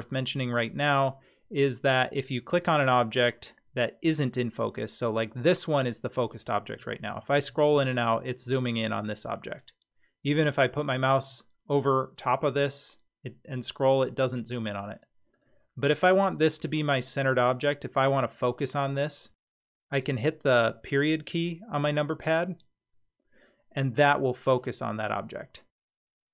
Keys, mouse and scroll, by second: 2.5 click, 6.7-7.1 scroll up 7, 7.1-7.7 scroll down 18, 7.7-8.6 scroll up 15, 9.1-9.9 scroll down 4, 10.4-11.2 scroll up 5, 11.2-12.2 scroll down 2, 12.2 scroll down 1, 12.7-13.2 scroll down 1, 13.2 scroll down 1, 13.6-14.3 scroll down 2, 15.3 click, 20.6 KP_Decimal, 24.1-25.0 scroll down 14, 24.9-26.2 scroll up 8, 26.2-26.3 scroll down 2.